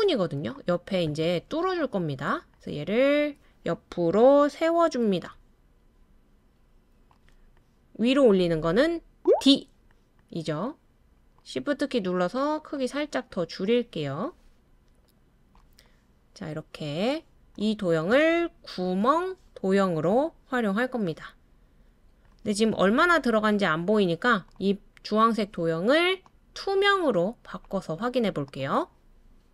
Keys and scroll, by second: 9.3 d.